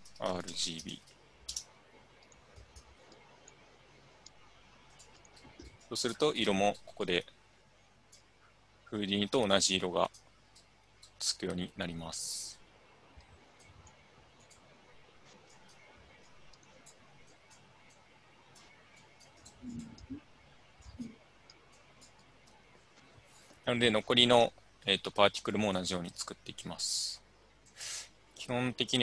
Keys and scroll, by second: 0.0-1.3 typing, 1.5 Return.